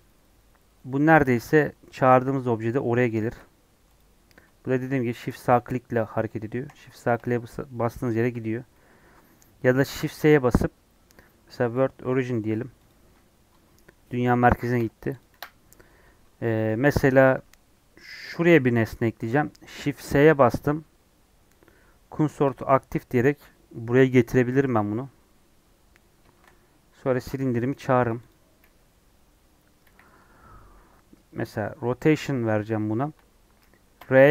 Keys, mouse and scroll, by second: 4.0 shift+a, 4.7-12.1 shift+right drag, 12.8 click, 14.7 Delete, 15.2 click, 15.3 Delete, 15.6 middle click, 15.9-16.2 scroll up 2, 16.6 middle click, 16.9 click, 17.0 Tab, 18.1 click, 22.3 shift+s, 23.2-24.8 middle drag, 24.8-25.5 scroll up 1, 25.5 scroll up 1, 25.6 Tab, 28.3 shift+a, 28.5-29.2 scroll down 5, 29.2-29.8 scroll up 1, 29.8 KP_1, 30.2 KP_3, 31.6 middle click, 31.9 scroll up 2, 32.4-34.0 shift+middle drag, 34.0 r.